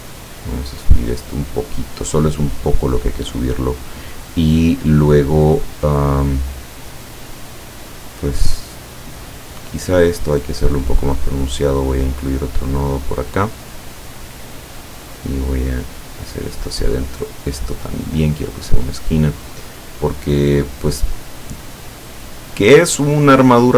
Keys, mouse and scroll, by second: 10.8 click, 11.5-14.0 drag, 15.3-16.8 drag, 18.2 click, 19.7-21.7 drag, 22.2 click, 23.3 click.